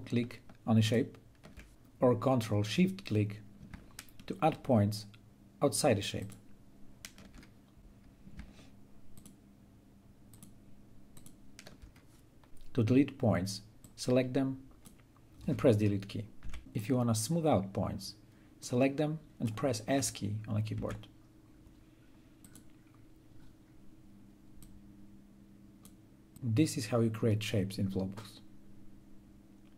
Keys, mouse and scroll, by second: 3.2 ctrl+click, 9.9 ctrl+shift+click, 13.4-16.0 drag, 16.0 d, 16.5-20.4 drag, 20.4 s, 22.1-26.3 drag.